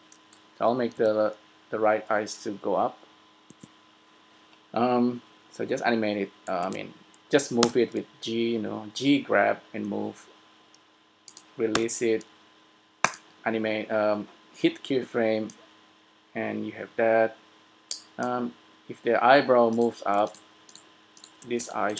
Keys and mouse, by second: 1.0 g, 5.9 i, 7.7 g, 11.5-13.3 drag, 12.0 i, 15.8-17.5 drag, 19.0-20.3 middle drag, 21.6 right click.